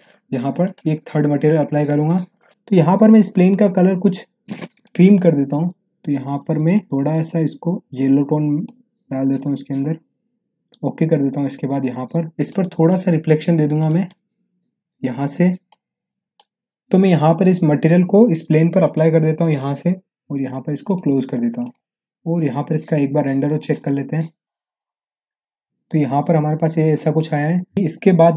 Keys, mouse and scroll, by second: 0.6 click, 2.5 m, 4.1 click, 7.7-9.0 drag, 18.8 click, 21.6-22.5 middle drag, 23.6 click.